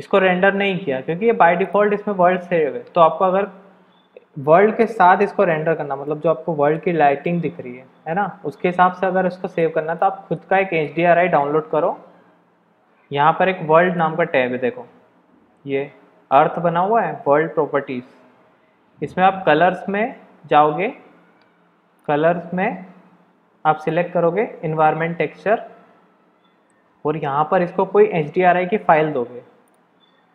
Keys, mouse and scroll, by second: 1.6 click, 6.0-6.8 middle drag, 7.3-9.6 middle drag, 10.0-10.4 shift+middle drag, 10.5 middle click, 13.8 click, 22.1-22.6 drag, 23.8-24.8 drag, 29.6 click.